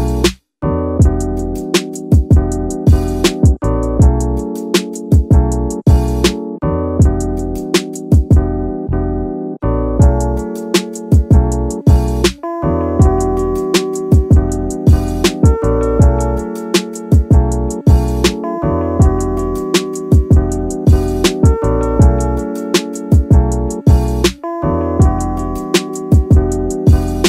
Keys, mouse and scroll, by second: 0.1 click, 0.4-0.8 scroll down 2, 1.0-1.8 scroll up 2, 4.8-5.2 scroll up 2, 6.9-7.6 drag, 8.9-9.7 drag, 11.8-15.6 drag, 14.8 KP_0, 16.4 click, 16.6-17.3 scroll down 1, 17.3-20.3 drag, 22.5-22.9 scroll down 2, 22.9 scroll up 2, 24.2 click, 25.0-26.4 drag.